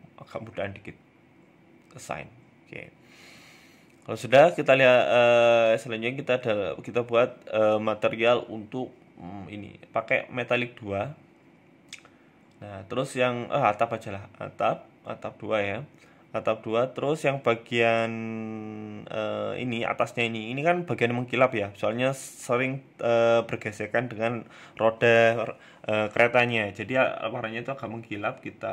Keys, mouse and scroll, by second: 1.5 click, 1.8 Tab, 2.0 middle click, 2.3 scroll down 2, 2.6 shift+middle click, 3.0-3.8 scroll down 2, 3.3 middle click, 4.0 right click, 5.4 middle click, 5.8 scroll up 1, 6.0 shift+middle click, 7.6 click, 10.4 middle click, 11.3 click, 12.8 shift+middle click, 13.1 middle click, 13.4 scroll up 1, 13.6 shift+middle click, 14.0 KP_3, 14.3 KP_1, 14.8 shift+middle click, 15.1-16.0 scroll up 8, 16.0 scroll down 3, 16.2 shift+middle click, 16.2-16.6 scroll down 3, 16.6 Tab, 16.8 shift+middle click, 17.1-17.8 scroll up 6, 17.5 shift+middle click, 17.8 a, 18.0 a, 18.1 x, 18.6 c, 22.1 shift+middle click, 22.3 scroll down 3, 22.5 shift+middle click, 22.8-23.6 scroll up 6, 23.0 shift+middle click, 24.1 c, 28.2 click.